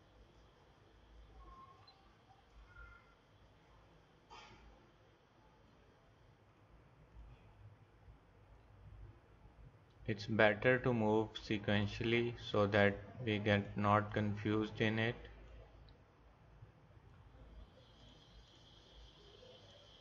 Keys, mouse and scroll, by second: 6.5-7.6 drag, 11.7 click, 18.0 click.